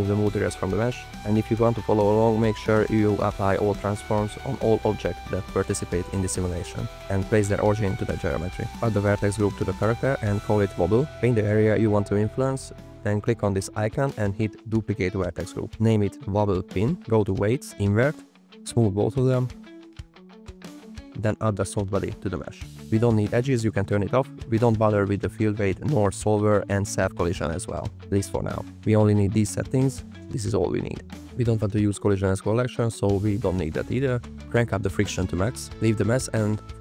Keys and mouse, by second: 0.0 n, 1.0 click, 1.4 shift+middle drag, 2.8-4.1 drag, 4.4 click, 5.8-6.3 drag, 6.6 drag, 6.9-7.4 drag, 7.6 click, 9.8 shift+click, 10.2 b, 10.4 click, 11.2 f, 11.2 click, 12.4 click, 12.5 f, 13.6-14.9 drag, 15.5 click, 15.8 BackSpace, 15.9 BackSpace, 17.1-18.1 drag, 18.9-20.0 drag, 20.3 click, 20.9 middle click, 21.7 middle click, 22.3-23.9 drag, 24.8 drag, 25.4 click, 25.7 click, 27.2 click, 27.6 click, 29.0 click, 29.5 drag, 30.2 click, 30.6 click, 33.7 click, 36.0 click.